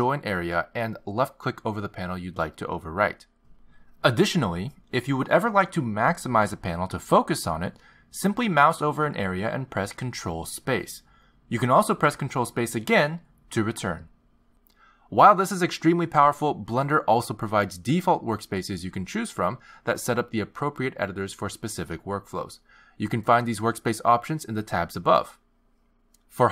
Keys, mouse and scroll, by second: 11.3 ctrl+space, 14.0 ctrl+space, 15.8 ctrl+space.